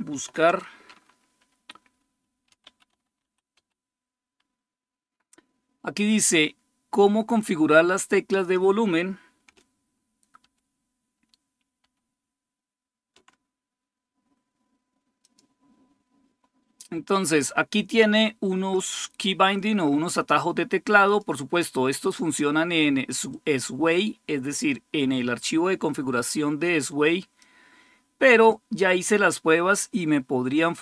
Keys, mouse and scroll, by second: 2.1-3.9 typing, 8.2 click, 10.2 ctrl++, 11.0 ctrl++, 11.6 ctrl++, 15.0 click, 20.9 click, 23.1-27.7 drag, 28.3-30.8 drag.